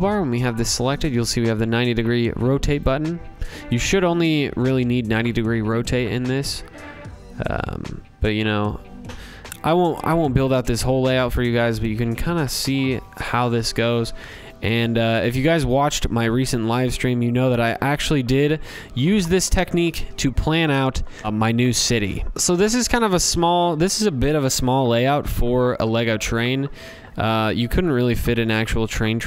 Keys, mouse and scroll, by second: 0.4 click, 1.7 click, 3.1 click, 4.2 click, 7.6 click, 8.6 ctrl+c, 8.9 ctrl+v, 10.5 click, 12.3 click, 12.8 ctrl+v, 14.5 click, 15.2 ctrl+v, 17.7 click, 18.8 click, 20.2-21.2 scroll, 21.2 scroll down 6, 22.2-22.6 scroll, 22.4 click, 24.9 click, 25.3-25.8 scroll, 29.1 click.